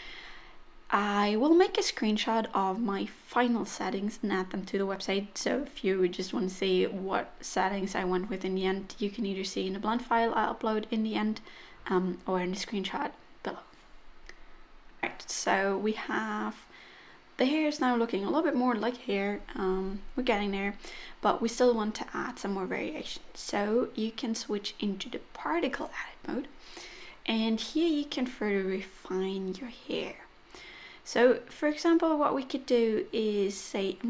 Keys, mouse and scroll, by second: 0.2-1.1 scroll up 4, 3.5 click, 7.6 click, 12.3 click, 12.5-12.9 scroll down 6, 12.7 middle click, 12.9 middle click, 13.2-13.6 scroll up 3, 13.5 middle click, 14.9-15.4 scroll down 2, 15.5 middle click, 18.2 middle click, 19.3 click, 21.0 click, 21.3 click, 24.3 middle click, 27.0-30.6 scroll up 15, 30.6 scroll down 1, 30.6-31.6 scroll down 3, 32.3 middle click, 33.6 scroll up 2, 33.9 middle click.